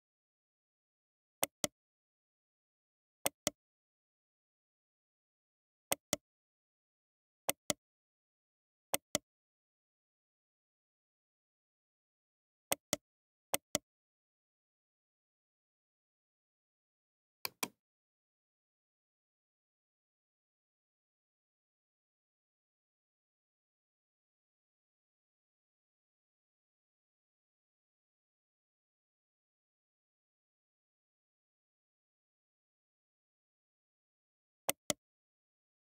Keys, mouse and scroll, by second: 2.7 h, 3.2-4.0 drag, 3.6 h, 4.8 alt+h, 6.7 h, 7.5 click, 7.7 h, 8.2 middle click, 10.2 right click, 11.5 Tab, 14.1 middle click, 14.3 middle click, 14.5 middle click, 14.7 middle click, 14.9 middle click, 16.3 x, 18.5 alt+h, 20.7 Tab, 21.7 alt+h, 22.2 middle click, 26.1 middle click, 26.4 middle click, 27.5-28.3 middle drag, 30.6 ctrl+z, 31.0 ctrl+z, 31.4 ctrl+z, 31.8 ctrl+z, 32.8 ctrl+z, 33.2 ctrl+z, 35.7 g.